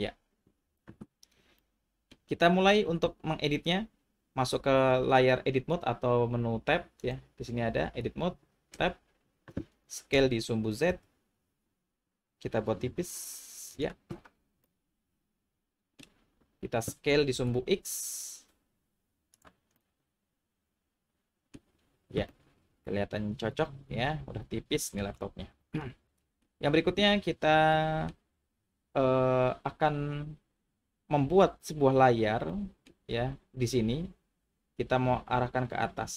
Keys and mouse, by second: 1.8 middle click, 7.1-8.0 drag, 8.8 Tab, 10.1 s, 10.9 z, 13.7 click, 14.6-16.0 middle drag, 17.1 s, 17.3 x, 19.3 click, 19.8-21.5 middle drag, 22.3-25.0 middle drag, 25.8 middle click, 27.8 middle click, 32.6 middle click.